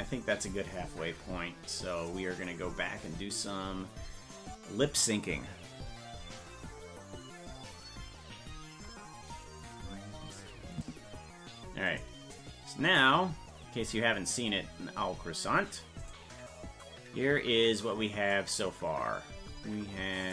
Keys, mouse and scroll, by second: 0.0 ctrl+s, 0.5 scroll down 1, 2.1-2.5 scroll down 26, 2.7-3.0 scroll down 2, 3.4-4.1 scroll down 1, 10.8 click, 11.9 click, 12.9 right click, 13.7-14.1 scroll up 1, 14.4-14.8 scroll down 1, 16.0 click, 20.2 click.